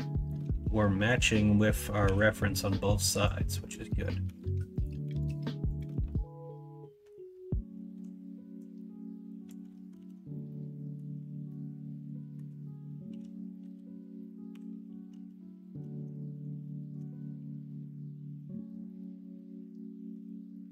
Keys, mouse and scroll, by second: 0.0-2.0 drag, 2.0 l, 3.7 click, 4.2 a, 5.0 a, 9.9 alt+z, 10.4 middle click, 10.9 middle click, 10.9 scroll down 1, 11.5 click, 11.6 middle click, 13.0 KP_1, 13.6 KP_3, 14.5 KP_9, 15.1 alt+z.